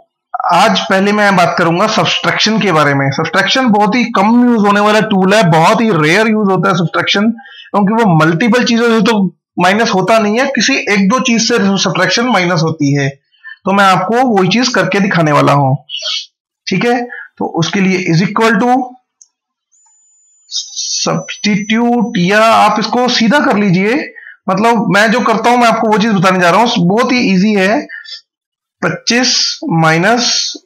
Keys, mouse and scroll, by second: 2.5 click, 17.4 =, 18.8-19.6 typing, 21.6-22.3 typing, 26.1 9, 27.6 Left, 29.6 -, 30.4 Left.